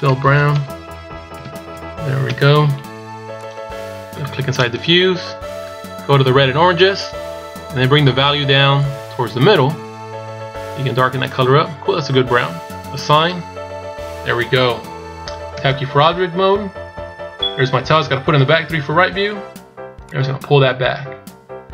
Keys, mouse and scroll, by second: 0.1 BackSpace, 0.2 BackSpace, 4.4 click, 12.9 click, 13.7-15.4 scroll down 5, 15.4 Tab, 18.3 KP_3, 19.8 click.